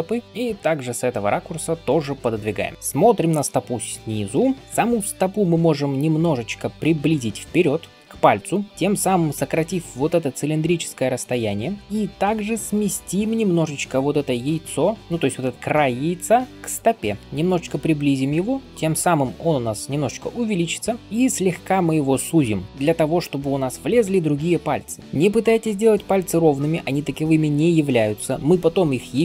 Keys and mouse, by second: 7.6 alt+q, 8.7 ], 12.6 alt+q, 22.7 [, 25.0 [.